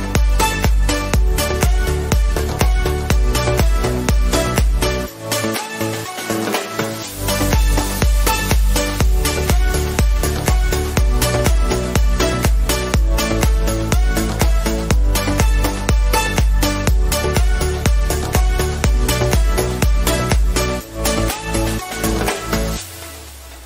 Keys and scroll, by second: 0.2 ctrl+d, 6.2 ctrl++.